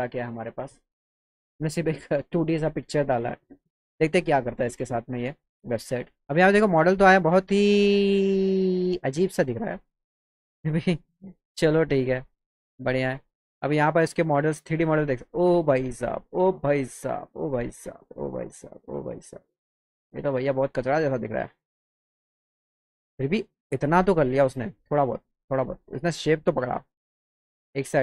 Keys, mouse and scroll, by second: 6.1 click, 8.8 click, 9.8 click, 11.6 click, 15.1 click, 16.4 click, 17.6 click, 18.5 click, 18.8 click, 19.4 click, 20.3 click, 21.3-22.6 drag, 22.6 click, 24.3-25.6 drag, 27.5-28.0 drag.